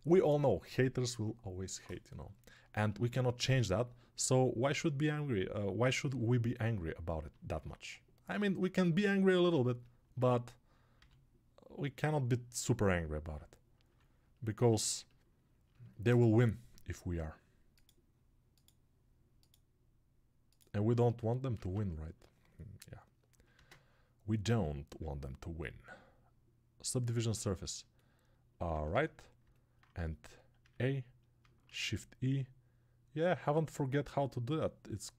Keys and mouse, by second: 7.1-9.6 alt+drag, 8.9 s, 9.6-24.6 alt+middle drag, 10.9 g, 13.9 3, 21.5 ctrl+Tab, 23.5 ctrl+space, 24.6-35.1 drag.